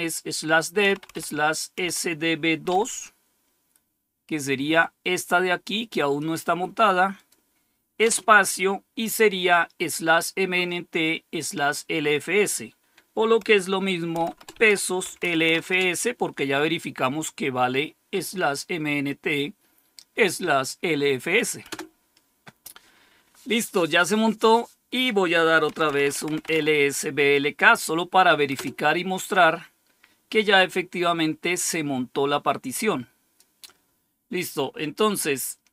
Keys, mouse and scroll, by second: 0.8-2.6 typing, 4.7-6.1 drag, 7.1 click, 7.9 typing, 14.1-15.9 typing, 21.6 Return, 25.4-26.9 typing, 28.4 Return, 32.2-33.3 drag, 34.7 click.